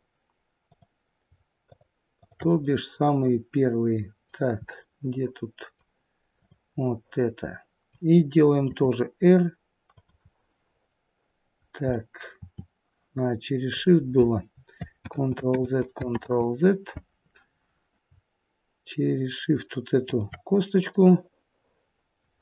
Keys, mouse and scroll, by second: 0.6 click, 1.6 shift+click, 2.7 shift+click, 2.7 middle click, 4.7 middle click, 6.3 click, 6.8 middle click, 8.7 r, 10.2 middle click, 11.9 middle click, 12.3 r, 15.0 ctrl+z, 15.5 ctrl+z, 20.0 shift+click, 20.8 middle click.